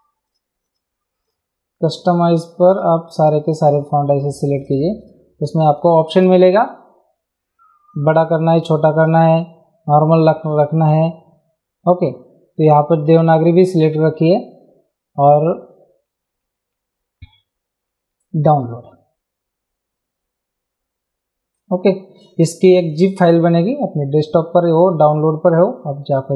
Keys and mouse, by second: 2.4 click, 4.7 click, 8.1 click, 13.1 click, 18.6 click.